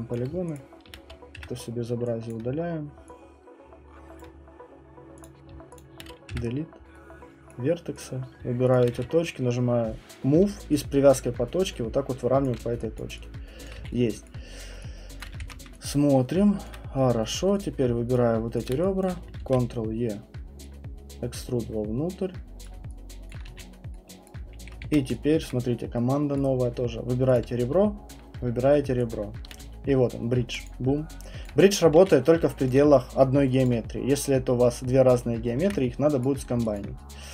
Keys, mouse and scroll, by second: 0.1 alt+click, 0.3-1.0 typing, 0.5 middle click, 1.0 right click, 1.4 Delete, 1.9 middle click, 4.2 click, 5.3 click, 5.8 alt+click, 6.3 Delete, 7.5 right click, 8.0 click, 8.7 shift+click, 8.9 w, 10.4-12.4 typing, 12.4 click, 13.0 alt+click, 13.7 alt+click, 13.8 q, 14.2 right click, 15.2 middle click, 15.2 click, 15.7 ctrl+1, 16.7 alt+click, 17.7 click, 18.1 shift+click, 18.6 shift+click, 19.4 ctrl+e, 22.6 click, 23.3 alt+click, 23.5 q, 24.3 middle click, 24.3 scroll, 24.8 ctrl+1, 25.1 middle click, 25.4 right click, 26.3 right click, 27.3 click, 30.7 click, 31.5 alt+click, 31.9 q, 32.2 scroll, 32.7 alt+click, 33.2 middle click, 35.1 right click, 36.2 ctrl+1, 36.2 right click, 36.7 alt+click.